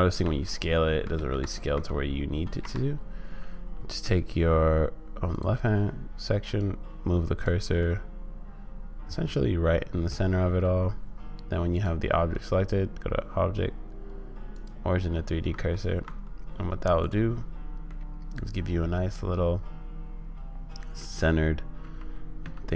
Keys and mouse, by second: 0.2 s, 4.0 middle click, 5.3 click, 6.5 click, 7.8-10.1 middle drag, 11.8-14.8 drag, 15.5 Tab, 16.0 Tab, 17.0 click, 18.0-21.0 middle drag, 21.8 g.